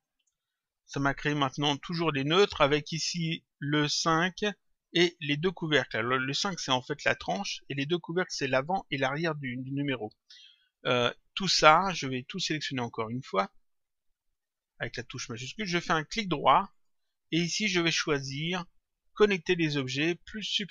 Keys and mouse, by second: 3.4 click, 4.7 click, 12.6 click, 14.2 click, 16.6 right click.